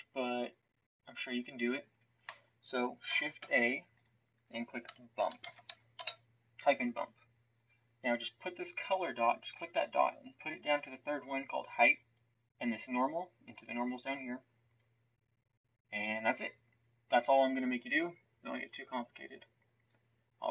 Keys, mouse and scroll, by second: 3.4 shift+a.